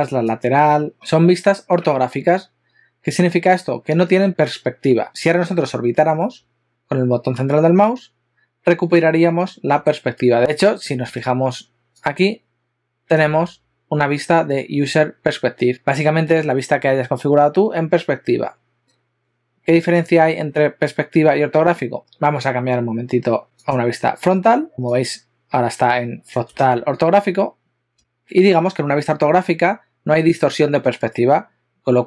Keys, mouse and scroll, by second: 0.5 click, 0.9 click, 7.8 middle click.